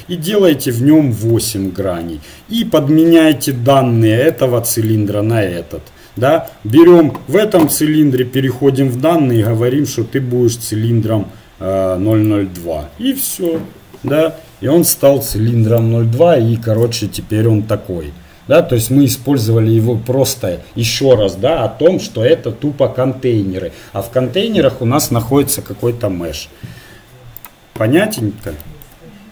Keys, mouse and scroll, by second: 0.5-2.8 drag, 2.8 middle click, 3.3-6.5 right drag, 10.3 click, 13.3 right click, 14.1 Delete, 15.7-18.0 right drag.